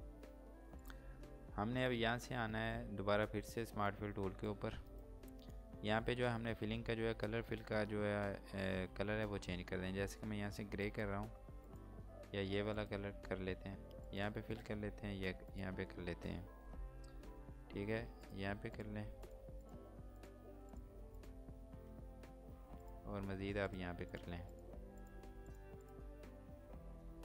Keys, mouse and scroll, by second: 0.8 click, 3.6 click, 7.5 click, 10.6 click, 18.2 click, 21.9 scroll down 1, 22.3 scroll up 1, 22.9 click, 26.3 scroll down 1, 27.0 scroll up 1.